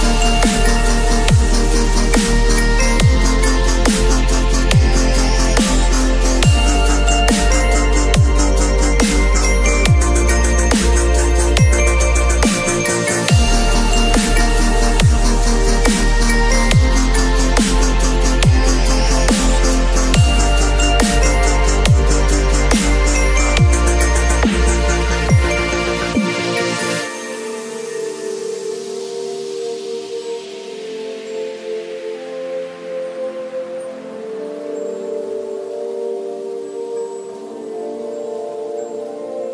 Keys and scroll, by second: 0.0 ctrl+l, 3.1 Return, 5.8 ctrl+t, 16.0 space, 17.0 v, 17.9 ctrl+s, 21.6 ctrl+a, 21.8 ctrl+c, 22.1 ctrl+w, 23.0 ctrl+v, 23.4 ctrl+t, 26.6 space, 29.1 b, 30.3 ], 33.8 v, 37.3 b.